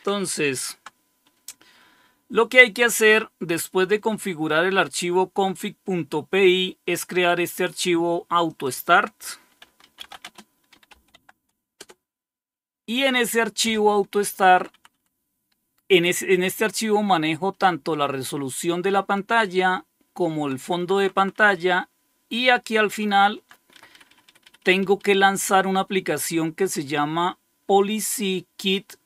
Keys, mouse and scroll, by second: 0.5 ctrl+x, 6.3-7.7 drag, 8.0-9.2 drag, 9.3-11.3 typing, 11.6 Return, 14.2 Down, 14.4 Down, 14.6 Down, 14.9 Down, 17.4-18.9 Right, 18.0-20.7 typing, 19.1 Right, 20.7 Down, 20.9 Down, 21.1 Down, 21.2 Down, 21.5 Down, 21.7-23.4 Down, 23.6 Home, 23.8 Up, 23.9 Up, 24.2 Up, 24.3 Up, 24.5 Up, 24.7 Up, 24.9 Up, 25.1 Up, 25.3 Up.